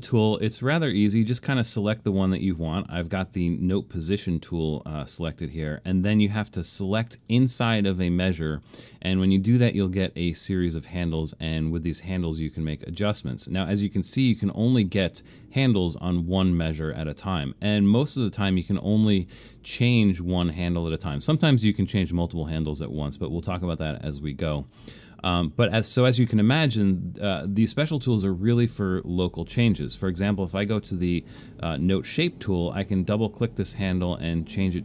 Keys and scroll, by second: 0.3 super+=, 1.1 super+=.